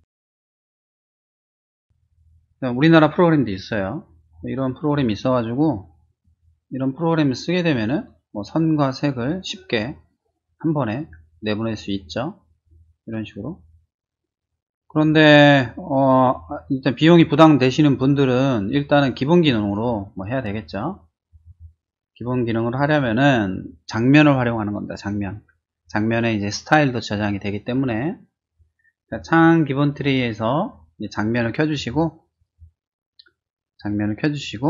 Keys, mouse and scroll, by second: 0.5 click, 1.0 click, 1.7 click, 3.9 middle click, 3.9-4.9 scroll down 5, 4.5 middle click, 4.7 middle click, 6.2-19.7 drag, 22.7 click, 28.9 click, 31.7 click, 32.3 click.